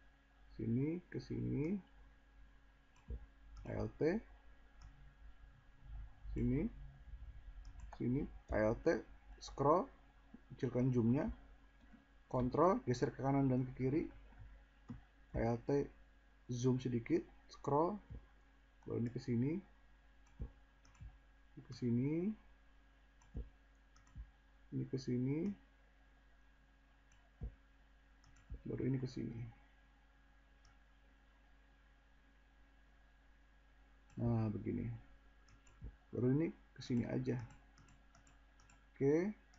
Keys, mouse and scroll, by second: 8.6 alt+scroll, 12.5 ctrl+scroll, 15.0 scroll, 18.9 scroll, 30.5-30.9 drag.